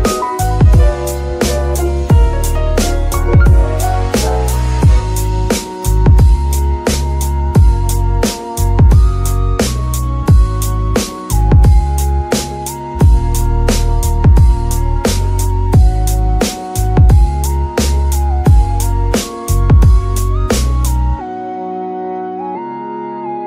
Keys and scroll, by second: 1.7 g, 2.1 Escape, 4.4 c, 5.4 Escape, 5.9 s, 6.9 KP_3, 7.6 s, 9.2 Tab, 15.1 alt+shift+s, 17.6 Tab, 18.1 Tab, 18.1 g, 18.5 Escape, 21.0 g.